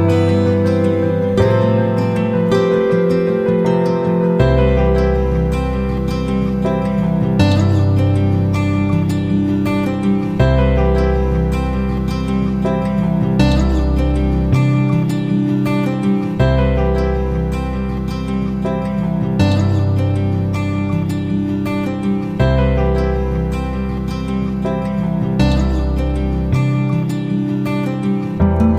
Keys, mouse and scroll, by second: 0.4 shift+click, 2.0-4.3 drag, 5.2 shift+Right, 7.0 click, 12.4 shift+click, 13.5 click, 14.6-17.0 shift+drag, 18.6 click, 19.1 shift+click, 21.7 shift+click, 22.7 click, 23.9 shift+click, 25.1 shift+click, 26.1 click.